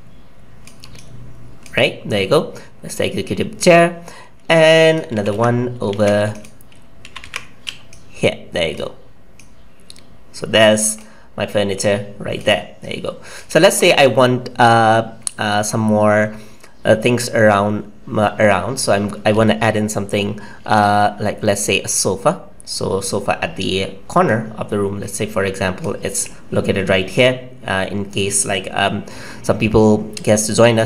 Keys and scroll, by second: 5.1 ctrl+c, 5.9 ctrl+z, 7.0 ctrl+c.